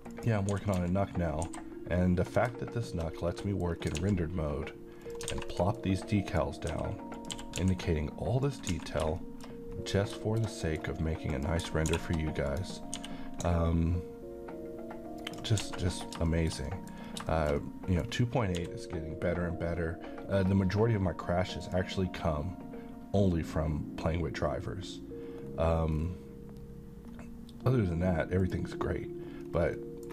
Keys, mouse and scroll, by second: 0.0-1.5 typing, 0.1 click, 2.2 click, 3.1-3.5 scroll down 1, 3.5 middle click, 3.7 scroll down 1, 4.0 alt+x, 5.0 click, 5.3 alt+a, 5.5 middle click, 5.8-6.3 scroll up 1, 6.3 click, 6.7 s, 7.2 click, 7.3 g, 7.6 x, 8.5 click, 8.7 a, 9.2 middle click, 9.9 scroll down 1, 10.2 shift+middle click, 11.3 click, 11.9 f, 12.5 click, 13.0 g, 15.2 ctrl+click, 15.6 a, 15.8 middle click, 17.1 scroll down 1, 17.3 shift+middle click, 17.9-18.2 middle click, 18.5 d, 21.6 click, 25.3-27.8 scroll down 2, 28.4 click, 29.4 scroll up 2, 29.8 middle click, 29.9 scroll down 1.